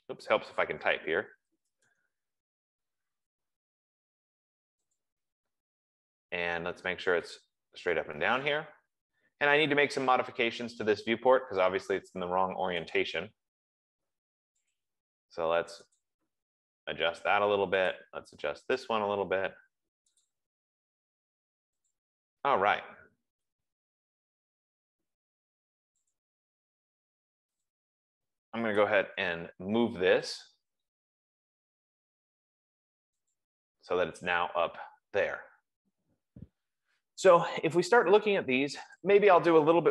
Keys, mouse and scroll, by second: 0.0-2.7 typing, 5.3 click, 7.8 click, 9.0 scroll, 9.2 middle click, 13.3 click, 14.4 F15, 15.1 click, 16.3 click, 18.2 click, 19.2 click, 20.5 click, 22.2 click, 23.7-24.2 scroll, 26.7 click, 28.1 click, 28.8-29.8 typing, 30.7 click, 33.7 click, 34.9-35.4 scroll, 35.9 Escape, 38.6 click, 39.3 click.